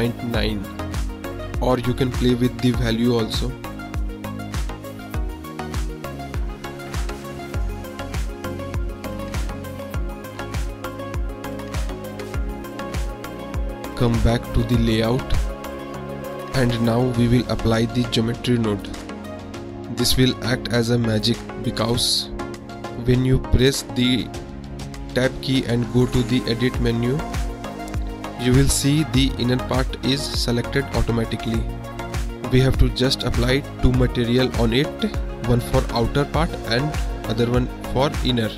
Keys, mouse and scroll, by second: 2.3-4.0 middle drag, 4.1 click, 4.4-5.4 drag, 6.3-8.8 drag, 9.2 drag, 10.0 click, 11.7-12.0 middle drag, 16.1 click, 16.9 middle drag, 17.2 click, 17.7 KP_Decimal, 18.4 drag, 24.1 click, 24.4 click, 25.2-26.1 drag, 28.2 Tab, 28.8-30.1 middle drag, 32.0-33.4 drag, 35.2-37.2 drag, 38.1 click.